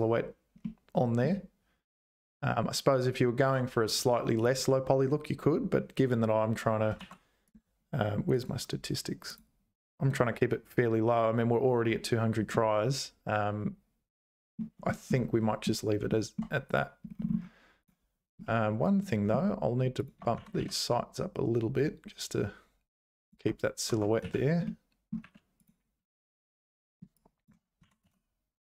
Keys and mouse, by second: 0.6 middle click, 3.4 click, 4.0 h, 4.3 click, 4.6 h, 7.0 ctrl+s, 8.3-9.4 right drag, 12.5-14.6 middle drag, 14.9 shift+middle click, 16.1 shift+middle click, 17.8 click, 18.4 shift+middle click, 20.4 g, 23.9 Tab, 24.2 z, 24.6 middle click, 25.2 3, 26.8 1, 27.3 shift+click, 27.8 g.